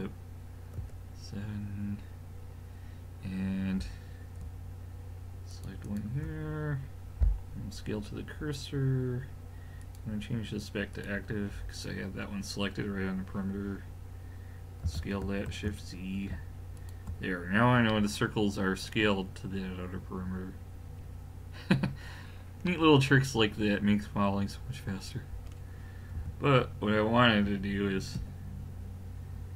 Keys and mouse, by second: 0.8 KP_7, 5.5 click, 14.8 s, 17.9-22.7 middle drag, 26.2 a, 27.4 KP_3, 28.2 KP_1.